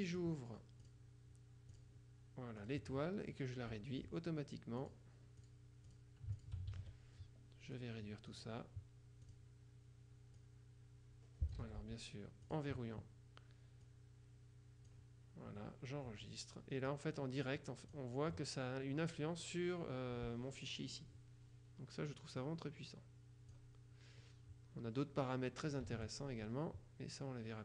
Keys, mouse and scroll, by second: 1.0 click, 1.8 click, 2.7 click, 5.0-7.0 drag, 6.8 ctrl+shift+a, 7.8 click, 9.4 click, 10.6-12.1 drag, 11.7 ctrl+z, 12.6 click, 14.0-15.5 drag, 18.0 click, 22.5-24.1 drag, 26.0 ctrl+z.